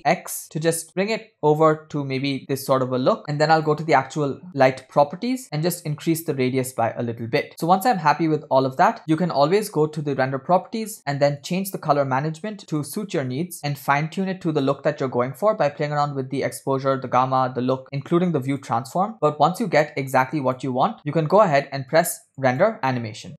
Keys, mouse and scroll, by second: 3.6 click, 5.0 click, 6.1-8.7 drag, 8.7 space, 10.5-11.4 scroll down 5, 11.4 drag, 11.8-12.7 scroll down 4, 12.7-15.1 drag, 18.0 click, 22.8 click.